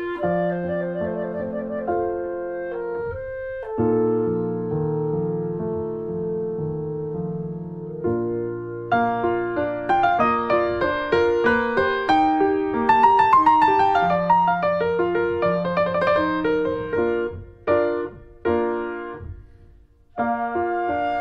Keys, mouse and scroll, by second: 1.6 shift+click, 1.8 s, 5.0 click, 5.7 click, 6.1 click, 7.0 middle click, 7.5 scroll down 3, 7.6 shift+middle click, 7.7 scroll up 1, 7.8 shift+middle click, 8.3 scroll up 1, 8.5 Tab, 8.7 Tab, 9.4 3, 9.6 click, 10.4 x, 11.5 click, 11.7 Tab, 11.8 middle click, 12.1 ctrl+s, 12.3 click, 12.9 ctrl+1, 13.1 click, 13.2 scroll down 1, 13.3 shift+middle click, 13.9 ctrl+s, 14.1-15.2 drag, 15.3 middle click, 15.8 click, 16.1 middle click, 16.2-17.0 scroll up 2, 16.6 middle click, 17.0 middle click, 17.8 Tab, 17.9 Tab, 18.1 click, 18.9 2, 19.1 click, 20.1 1, 20.5 click, 21.1 click.